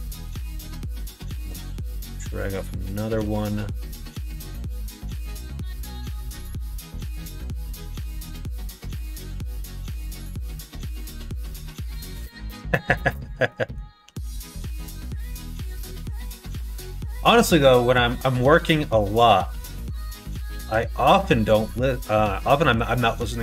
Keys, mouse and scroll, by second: 0.2 middle click, 0.7 middle click, 1.6 shift+d, 6.8 middle click, 7.6 middle click, 8.7-10.2 middle drag, 11.6 middle click, 12.7 middle click, 13.6 middle click, 14.0 g, 19.2 middle click, 19.9 scroll up 1, 20.1 middle click, 20.9 middle click, 22.5 middle click.